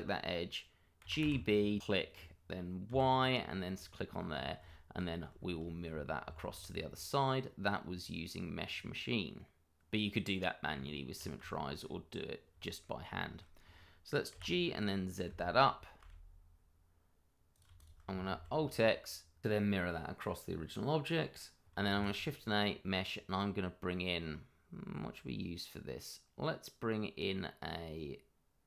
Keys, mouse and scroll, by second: 1.0 g, 1.2 b, 1.8 click, 2.9 y, 3.7 click, 4.0-4.3 scroll down 1, 4.6 shift+middle click, 5.3 scroll down 1, 5.6 shift+middle click, 6.3 alt+x, 10.7 Tab, 11.5 shift+middle click, 11.6 middle click, 11.8-12.5 scroll up 1, 12.6 shift+middle click, 12.7 middle click, 13.2 shift+middle click, 14.3 g, 15.2 x, 16.0 z, 17.7 shift+click, 17.8 click, 18.2 alt+x, 19.8 click, 20.8-21.6 scroll down 1, 21.6 click, 21.9 shift+a.